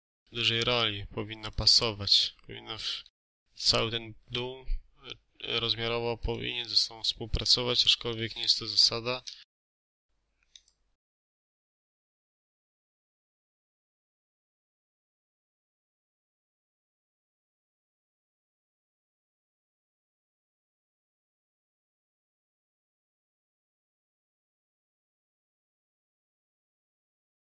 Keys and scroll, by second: 8.0 ctrl+a, 8.5 5, 9.0 Return, 11.4 space, 13.2-14.7 typing, 14.0 ctrl+a, 18.0 2, 18.5 9, 18.5 5, 18.6 Return, 19.1 Escape, 19.4 space, 21.1-23.8 typing, 24.8-26.7 typing.